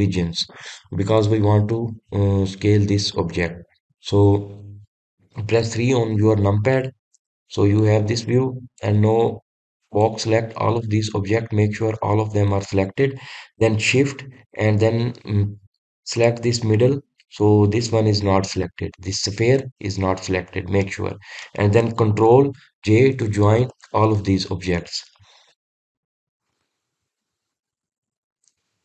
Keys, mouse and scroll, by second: 1.5-3.6 middle drag, 3.6 scroll up 1, 4.1-6.6 scroll down 2, 6.6 KP_3, 8.4-9.0 shift+middle drag, 9.0-9.8 scroll up 6, 9.8 drag, 11.8-14.9 middle drag, 17.2 shift+click, 19.2 scroll down 1, 19.8-21.3 scroll down 5, 21.3-21.8 scroll down 1, 21.8-24.6 middle drag, 24.6 ctrl+j.